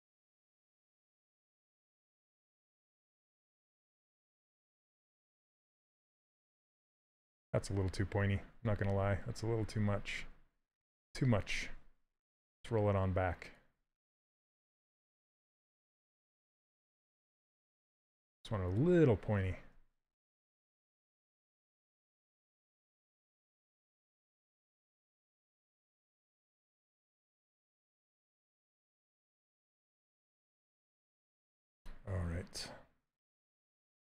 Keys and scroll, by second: 8.5 ctrl+z, 14.5 ctrl+z, 15.5 ctrl+z, 21.0 s.